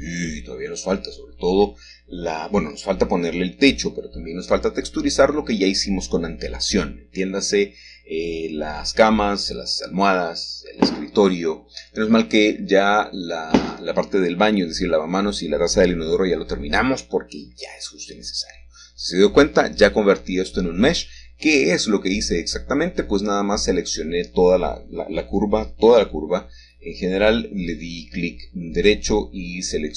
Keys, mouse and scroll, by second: 0.0 click, 1.2 middle click, 1.4 Tab, 2.3 middle click, 3.7-4.5 typing, 5.9 alt+shift+click, 9.9 F3, 10.4 typing, 11.8 Return, 13.9-14.3 scroll up 1, 14.5-19.1 shift+middle drag, 22.8 click, 23.9 shift+click, 24.8 ctrl+z, 27.0 shift+click, 27.5 ctrl+z, 27.9 shift+click.